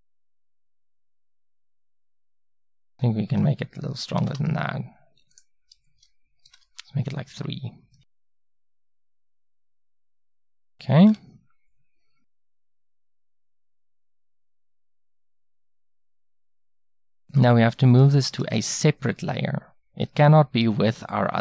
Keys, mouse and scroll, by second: 8.0-15.1 middle drag, 18.4 m.